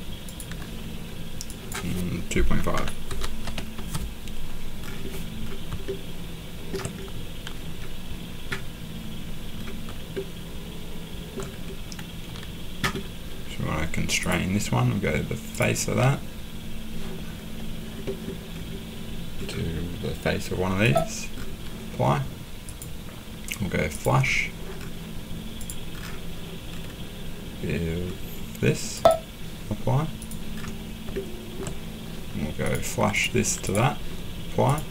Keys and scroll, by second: 2.5-3.9 typing.